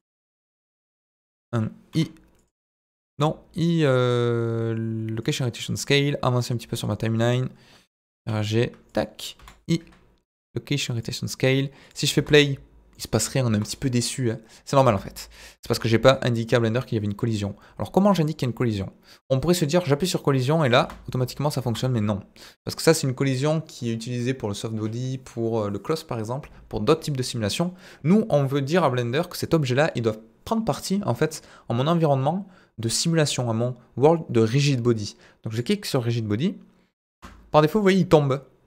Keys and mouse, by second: 0.0-1.1 drag, 1.9 i, 2.5 click, 3.1 i, 6.0-7.2 drag, 8.2 g, 8.2 middle click, 8.9 click, 9.4 i, 12.2 space, 12.9 middle click, 13.5 space, 14.3 click, 14.8 space, 15.7 space, 16.2 click, 18.2 click, 18.7 click, 19.6 click, 20.8 space, 21.6 space, 27.6 click, 29.5 click, 35.5 click, 37.1 space.